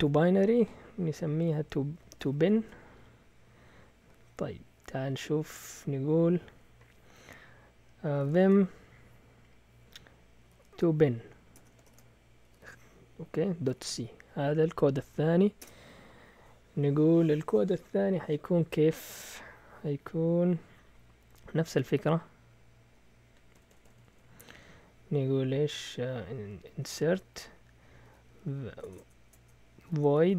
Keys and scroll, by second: 1.4 Escape, 1.9-2.7 typing, 7.9-8.8 typing, 10.2-14.3 typing, 15.3-16.1 typing, 21.5-22.4 typing, 23.5 Escape, 23.6 Escape, 23.8 Escape, 23.9 Escape, 26.7 typing, 27.8-30.3 typing.